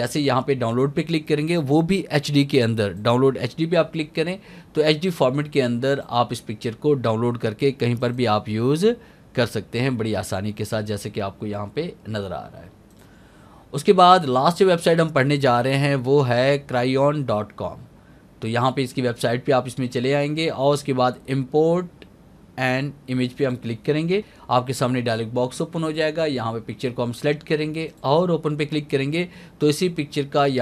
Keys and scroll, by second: 4.1 alt+a, 20.9 alt+a.